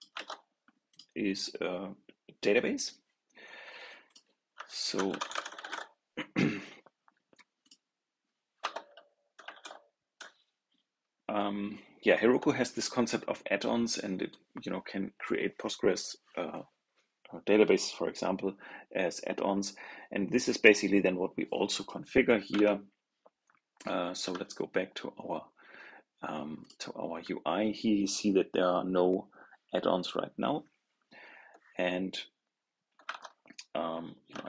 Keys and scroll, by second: 0.0 super+v, 22.4 super+Tab, 33.0 super+Tab.